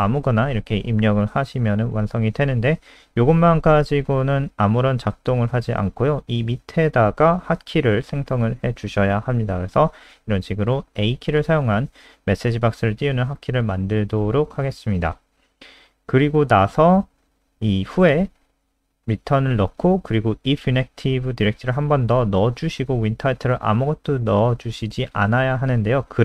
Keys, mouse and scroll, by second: 6.8 Return, 7.2-14.1 typing, 14.5 Escape, 16.1 click, 17.8-19.0 typing, 19.7 Up, 19.9 Up, 20.3 Home, 20.5 ctrl+shift+Right, 20.9 ctrl+c, 21.2 ctrl+End, 21.4 Return, 21.6 ctrl+v, 21.7 ctrl+s, 23.1 click.